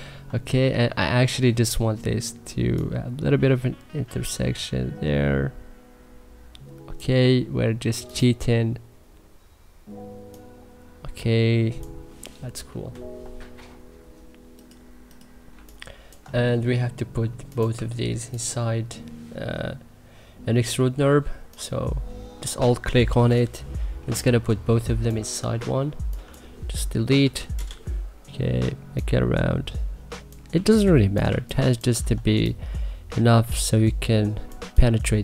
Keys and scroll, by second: 0.2 e, 15.3 3, 23.8 3, 27.0 0, 27.4 Return, 30.3 3, 31.8 e, 34.4 3.